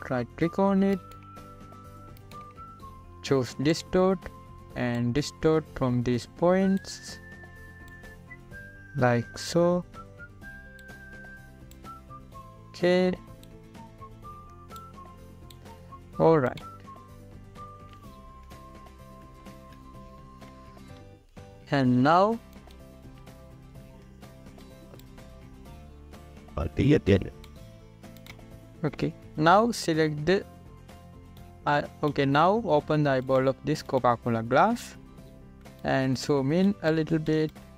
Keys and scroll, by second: 20.4 ctrl+=, 25.4 ctrl+t, 37.0 z.